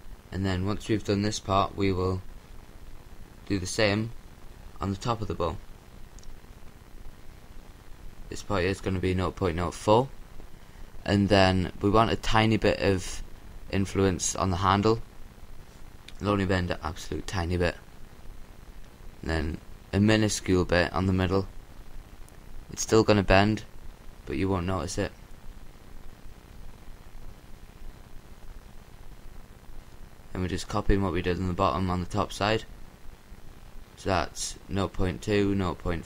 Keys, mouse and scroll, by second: 2.6-5.3 middle drag, 5.3-7.1 drag, 7.1-8.6 middle drag, 8.6-10.6 drag, 13.1-14.6 drag, 16.2-17.8 drag, 20.3-21.6 drag, 22.9-24.5 middle drag, 25.7-27.5 drag, 28.8-31.1 drag, 31.6-33.8 drag, 34.5-36.0 drag.